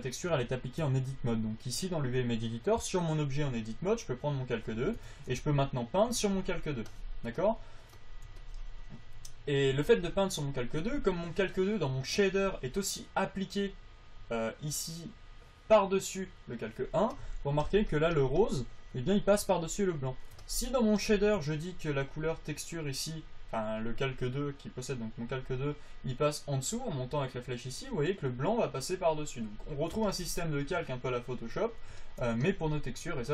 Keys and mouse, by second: 5.4 Tab, 6.3-7.6 drag.